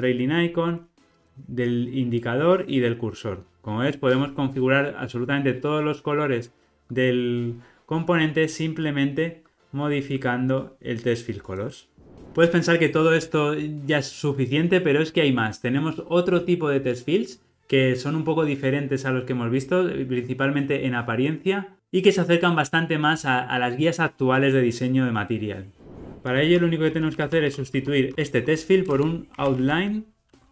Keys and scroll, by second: 5.9 alt+super+[, 25.8 super+z, 27.2 alt+shift+Left, 28.1 alt+shift+Left.